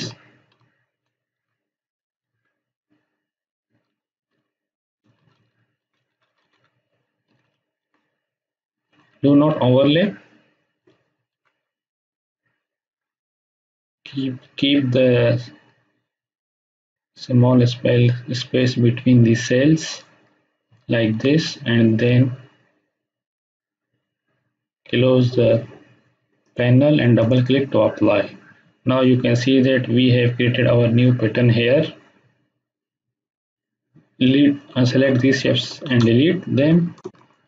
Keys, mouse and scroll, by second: 1.0 Up, 2.2 Down, 4.3 Up, 5.0 Down, 5.7 Up, 7.2 Down, 7.8 Up, 8.9 Down, 9.5 Up, 10.7 Down, 11.3 Up, 20.6 Down, 21.1 Up, 26.4 click, 33.6-35.1 drag, 35.8 Delete, 36.8 space, 37.0 click.